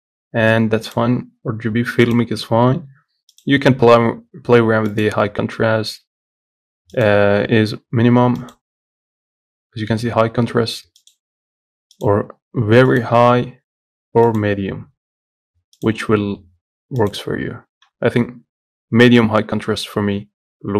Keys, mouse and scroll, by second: 0.0-1.9 drag, 3.7-18.9 drag.